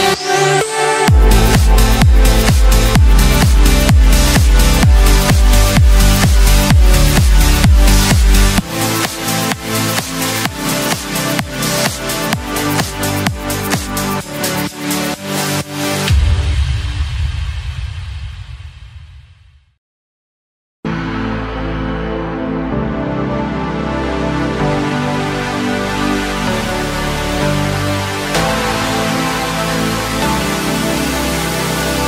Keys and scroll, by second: 2.0 ctrl+shift+a.